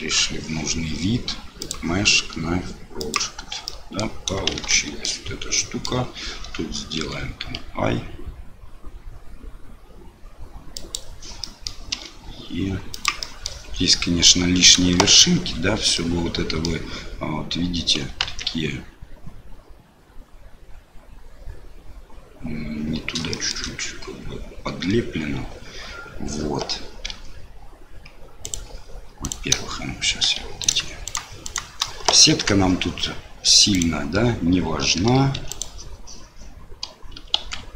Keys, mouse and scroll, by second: 1.7-3.2 drag, 3.6 middle click, 4.5 shift+z, 4.7 middle click, 5.5 middle click, 7.0 i, 11.5 middle click, 11.9 e, 13.3 middle click, 15.0 ctrl+z, 15.9 middle click, 18.2 ctrl+z, 23.3 shift+click, 27.1 i, 29.2 click, 30.3 2, 30.6 click, 31.0 shift+click, 32.3 ctrl+x, 33.7 click, 35.4 3, 35.5 click, 37.4 i.